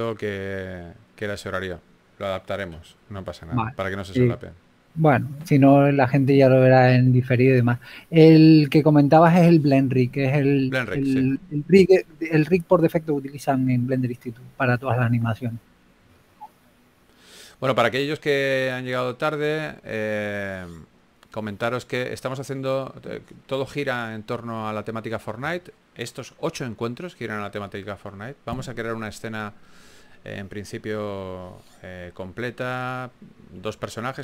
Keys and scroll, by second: 3.9-5.0 typing, 8.0 s, 10.1 s, 14.4-15.6 typing, 16.7-18.0 typing, 20.3 typing, 21.5 typing, 22.7 typing, 25.3 s, 25.7 shift+f, 27.4 4.